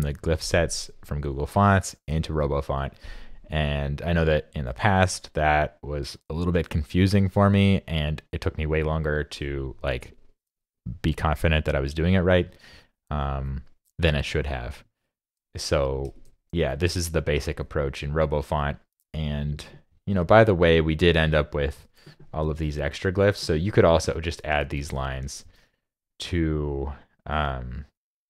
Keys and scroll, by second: 14.8 super+Tab, 24.7 super+c, 25.2 super+c.